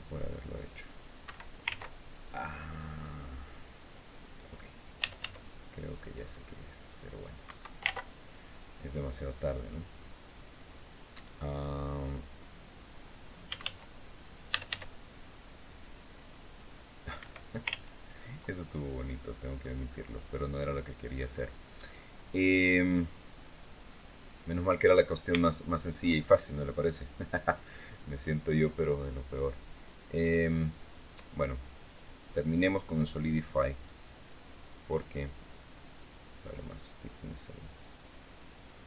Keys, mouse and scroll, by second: 1.0 Escape, 4.5-5.4 typing, 7.2 Escape, 13.2-14.9 typing, 16.9 Escape, 18.4 ctrl+scroll down 3, 18.7 click, 19.6-20.1 scroll up 1, 20.5 scroll down 1, 20.9-24.6 drag, 24.8-25.1 scroll up 1, 25.1 shift+click, 30.7 click, 32.7 click, 35.7-38.8 drag.